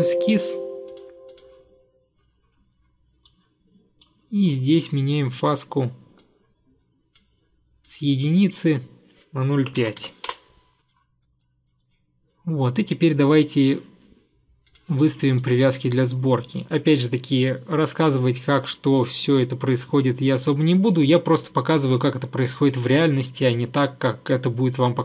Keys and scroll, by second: 9.6-10.7 typing.